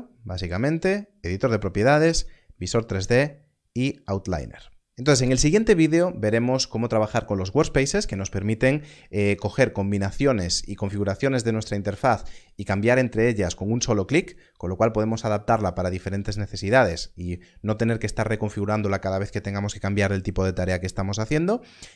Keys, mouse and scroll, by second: 0.0-0.4 scroll up 1, 0.4 middle click.